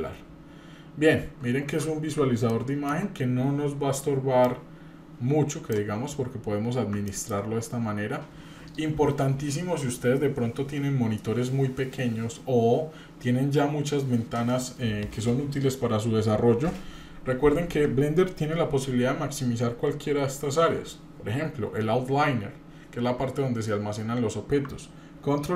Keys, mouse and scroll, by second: 0.7-1.3 scroll down 3, 1.1 scroll up 1, 2.5 middle click, 4.4-5.7 drag, 6.0 scroll down 2, 6.3-7.1 scroll up 1, 7.1 middle click, 7.3 scroll down 1, 7.6 scroll up 1.